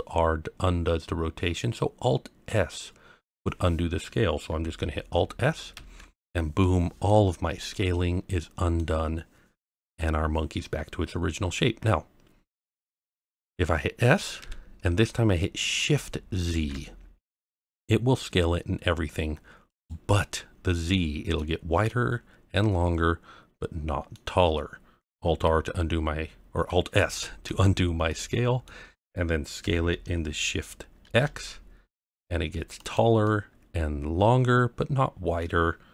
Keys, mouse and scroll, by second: 5.7 alt+s, 6.6-7.1 middle drag, 7.4-8.4 scroll up 2, 7.9-8.7 middle drag, 11.2-11.5 scroll down 1, 13.3 middle click, 14.4 s, 16.4 shift+z, 19.7 click, 20.3-21.4 middle drag, 21.9-24.2 middle drag, 27.4 alt+s, 28.1-28.7 middle drag, 29.6 s, 31.0 shift+x, 32.8 click, 33.2-35.4 middle drag.